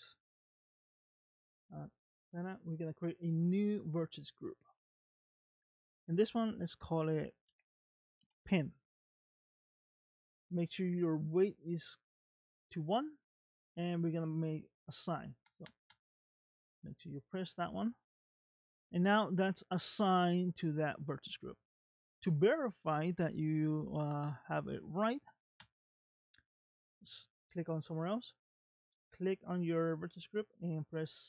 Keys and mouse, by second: 4.3 click, 5.5 click, 5.7-14.5 drag, 14.9 click, 15.5 click, 15.7 click, 15.9 click, 17.2 click, 17.3 click, 18.3 middle click, 22.3 middle click, 28.6 click.